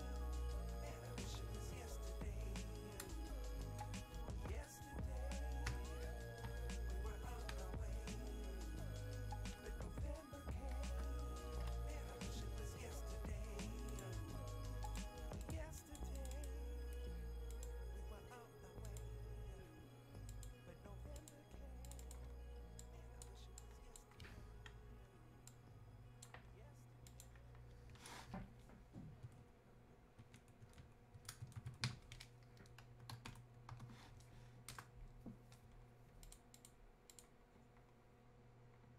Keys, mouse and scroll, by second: 0.8 typing, 2.1 7, 4.5 shift+2, 13.9-25.5 drag, 25.5 ctrl+click, 33.3-34.3 typing, 34.8 Return, 36.2 click.